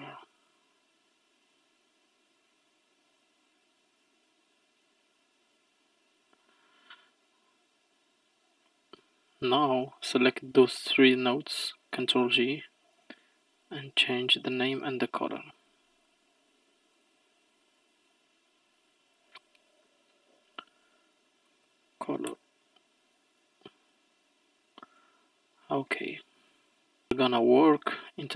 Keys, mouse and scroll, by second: 7.1-8.3 scroll down 6, 8.3-8.7 scroll down 3, 8.7-9.6 middle drag, 9.6 drag, 12.1 ctrl+j, 13.7 click, 14.7 click, 15.2-18.1 drag, 18.7-21.9 drag, 24.4-24.7 scroll down 1, 24.7-25.1 scroll up 1, 25.1-25.9 scroll down 4, 25.9-27.1 middle drag, 27.1-27.6 scroll up 4, 27.6-28.2 middle drag, 28.2-28.3 scroll up 1.